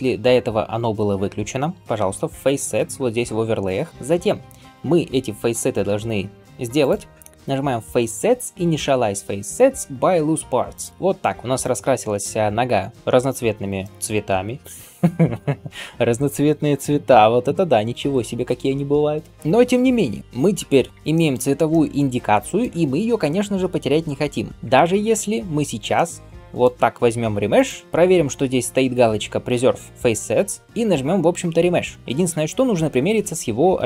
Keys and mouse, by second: 14.6-33.8 drag, 14.6-33.8 middle drag, 14.6-33.8 right drag.